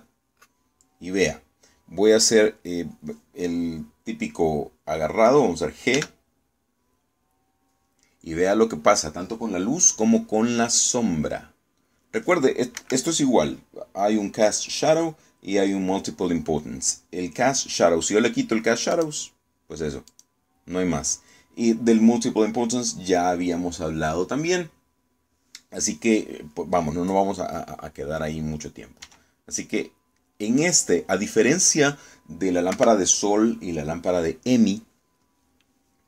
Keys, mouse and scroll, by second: 0.3 shift+z, 6.6 g, 13.4 Escape, 19.6 click, 20.7 click, 29.7 g, 33.4 Escape.